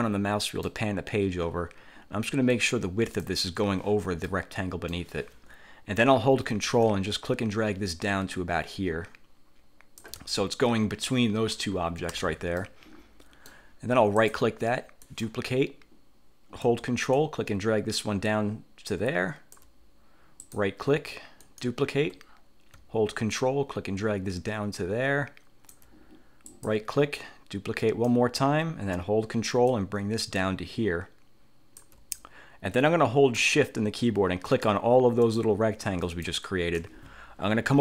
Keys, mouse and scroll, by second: 2.6 click, 4.4 middle click, 6.9-10.3 ctrl+drag, 10.5 ctrl+scroll up 2, 12.2 1, 12.7-13.8 drag, 15.1 click, 17.3-19.9 ctrl+drag, 21.6 click, 23.5-26.1 ctrl+drag, 26.7 click, 27.9 click, 29.8-32.1 ctrl+drag, 34.6 shift+click, 35.4 shift+click, 36.1 shift+click.